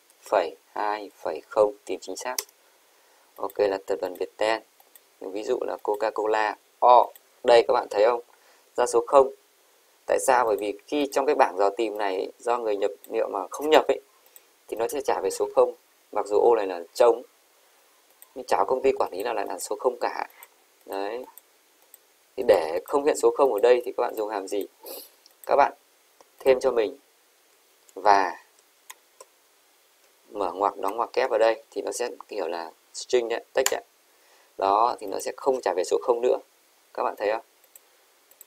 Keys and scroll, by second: 28.0 shift+7, 29.0 shift+', 31.0 shift+'.